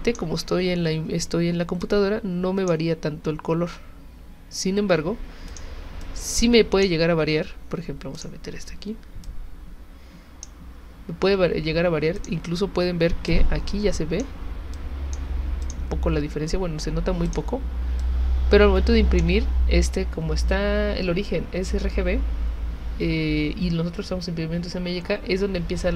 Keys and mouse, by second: 0.1-1.8 drag, 5.5 click, 6.0 click, 8.2 click, 9.2-10.4 drag, 12.1 click, 13.3 click, 14.7 click, 15.6 click, 17.3 click, 18.0-19.2 drag.